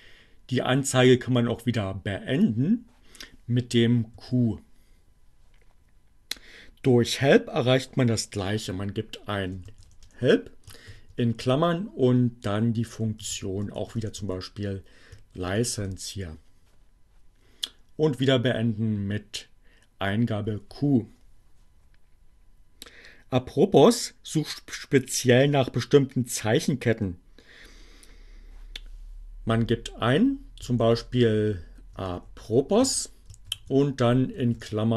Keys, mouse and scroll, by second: 3.4 q, 8.3-9.5 typing, 10.9-12.1 typing, 13.4-14.5 typing, 14.7 shift+Return, 18.7 q, 28.9-29.8 typing, 31.4-33.1 typing, 34.4-34.9 typing.